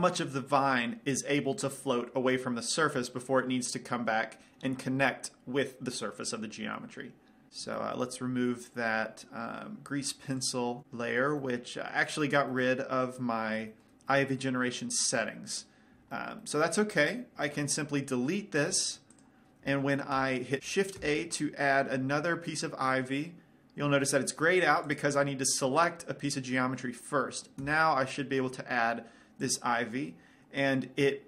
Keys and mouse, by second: 8.0-10.7 middle drag, 10.7 click, 11.7-15.0 middle drag, 15.4-17.3 middle drag, 19.0 x, 20.5 shift+a, 24.6 shift+a, 25.2-27.0 drag, 27.9 shift+a.